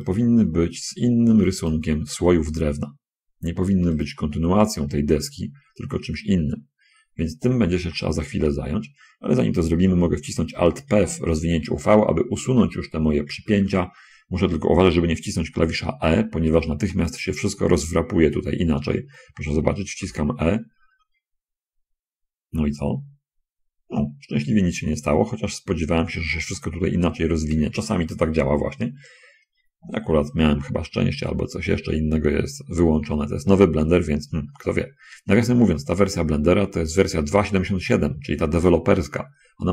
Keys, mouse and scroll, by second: 0.4 shift+click, 1.9 shift+click, 7.7 a, 8.1 a, 12.8 alt+p, 14.4 middle click, 16.0 scroll up 1, 18.4-19.2 scroll up 2, 20.3 e, 31.8 scroll up 1, 32.4-34.2 middle drag, 34.8 middle click, 35.6 middle click.